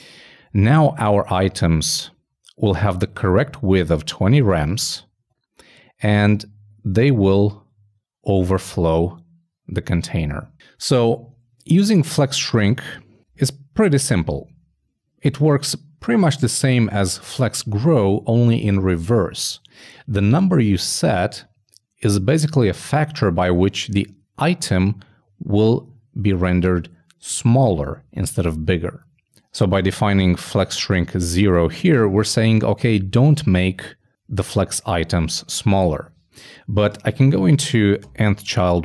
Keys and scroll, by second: 2.0 shift+super+f, 6.1 shift+Escape.